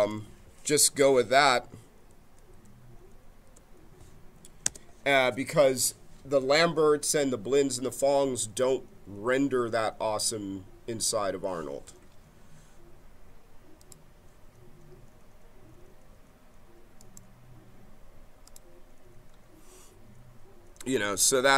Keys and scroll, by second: 2.4 BackSpace, 5.5 Return.